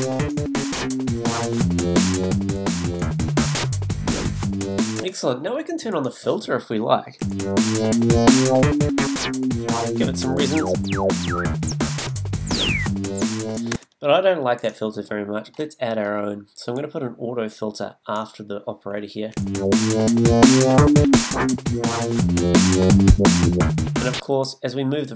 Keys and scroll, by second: 5.0 space, 7.2 space, 13.7 space, 19.3 space, 24.2 space.